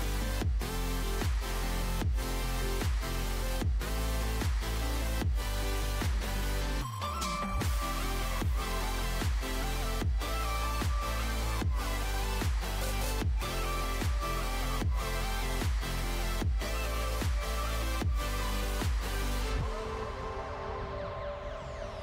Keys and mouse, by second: 1.0-3.1 right drag, 2.2 f, 3.1 w, 11.1-16.2 right drag, 13.0 w, 16.4 w, 19.9-20.9 drag.